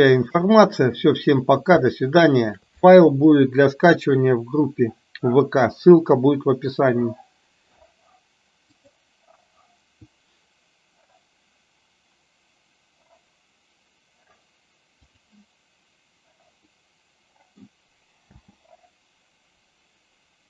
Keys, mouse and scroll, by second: 1.2 middle click, 2.0 shift+middle click, 10.9 click, 15.0 click, 16.7-17.7 middle drag, 18.6 space.